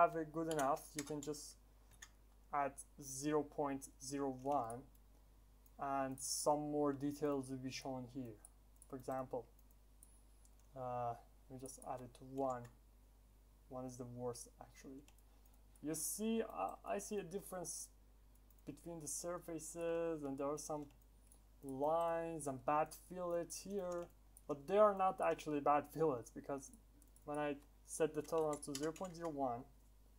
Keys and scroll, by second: 12.4 Return.